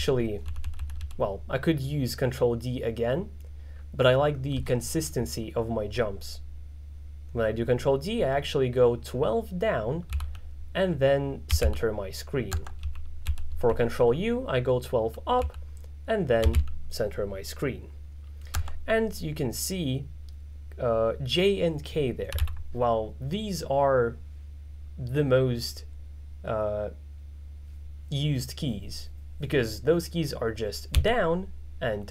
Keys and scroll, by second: 4.7 h, 10.2-12.2 typing, 15.5-17.2 typing, 31.1 j.